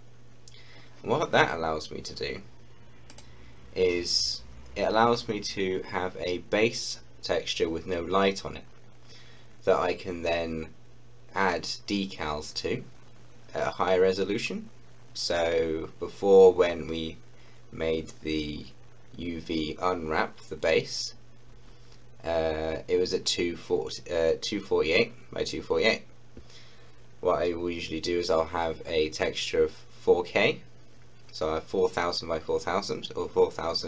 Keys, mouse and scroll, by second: 3.0 click.